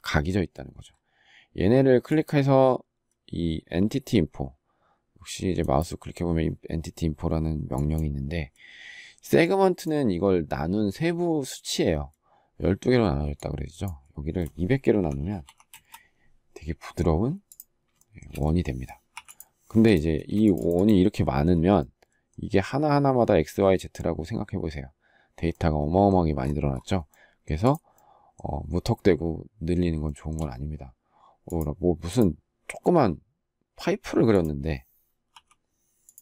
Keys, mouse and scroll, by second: 15.5 Return, 17.7 shift+middle click, 18.9 p, 19.8 space, 29.8 shift+middle click.